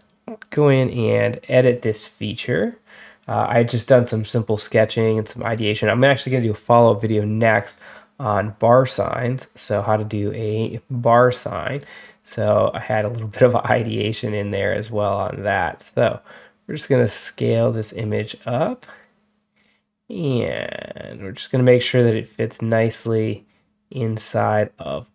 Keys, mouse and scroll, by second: 0.3 right click, 1.2 click, 4.1 click, 5.0 scroll up 1, 5.3-5.9 scroll down 4, 8.1-11.6 drag, 12.2-12.8 drag, 14.0-16.7 drag, 17.6-19.5 drag, 20.3-21.7 drag, 22.4-25.1 drag.